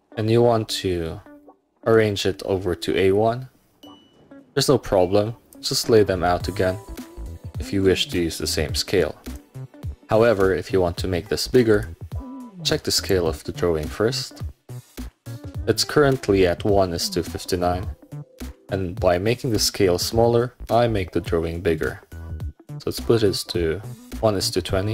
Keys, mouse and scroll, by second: 0.1-0.6 scroll down 2, 1.4 middle click, 1.8 middle click, 3.2-4.0 scroll up 2, 4.6-5.6 drag, 6.9 scroll up 2, 8.8-9.1 scroll down 2, 9.1 middle click, 9.6-10.0 scroll up 1, 11.8 click, 13.1 right click, 15.1 click, 24.2 click.